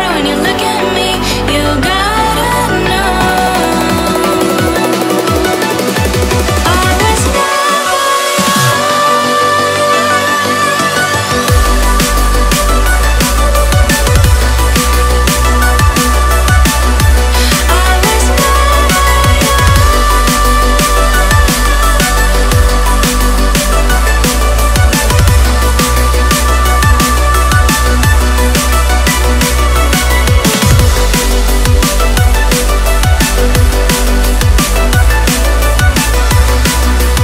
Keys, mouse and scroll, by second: 0.3 click, 0.8 shift+s, 1.8 shift+a, 3.4 scroll down 2, 3.7 s, 5.4 click, 6.9-7.4 scroll up 1, 7.5 s, 8.7 click, 9.2 shift+a, 10.1 shift+s, 12.4 s, 13.6 click, 15.5 Tab, 15.9 click, 17.1 s, 19.1 Tab, 19.7 Tab, 19.9 click, 20.6-21.1 scroll up 1, 21.1-21.6 scroll down 1, 22.0 click, 23.8 click, 24.6 click, 25.1 click, 26.0 click, 28.9 click, 30.2 click, 31.0 click, 35.2 0.